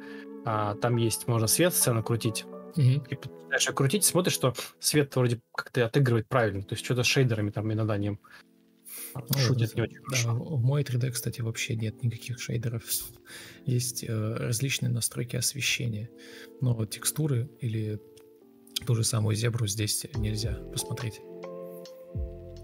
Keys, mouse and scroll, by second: 0.9 ctrl+Delete, 2.0 Delete, 2.0 ctrl+z, 2.7 Delete, 3.9-4.7 typing, 9.8 ctrl+space, 10.5 alt+shift+c, 10.8 ctrl+click, 12.5 ctrl+click, 14.8 shift+click, 15.3 ctrl+d, 16.1 Delete, 17.7 ctrl+click, 19.2 ctrl+click, 19.5 ctrl+click, 20.7 ctrl+shift+o.